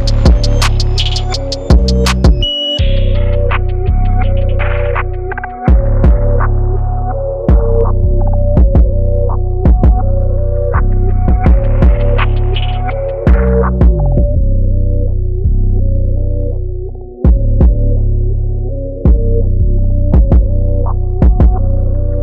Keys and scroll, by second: 0.1 super+=, 0.2 super+=, 0.3 super+=, 0.9-1.9 typing, 4.0 typing, 5.2-7.0 typing, 7.5 super+z, 8.5 b, 12.7 super+z, 14.4 super+z, 14.4 super+z, 14.5 super+z, 14.7-15.5 typing, 19.2 super+z, 19.3 super+z, 20.9 super+-, 21.2 super+-.